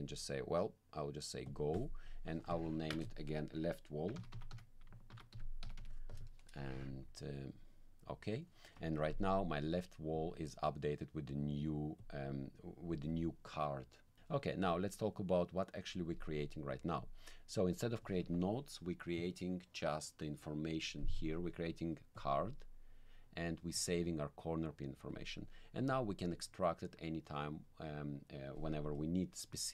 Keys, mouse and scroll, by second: 1.5 click, 3.8-6.1 typing, 7.5 click, 10.1 click, 12.0 click, 15.1 click, 17.0 click, 22.1 click, 23.7 click, 25.1 click, 25.9 click.